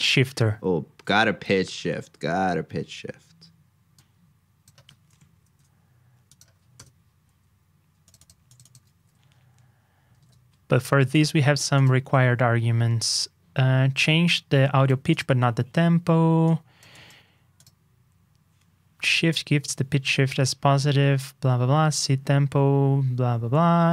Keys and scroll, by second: 1.4 super+c, 1.6 super+Tab, 5.2 alt+shift+Down, 8.9 super+v, 10.1 super+Tab.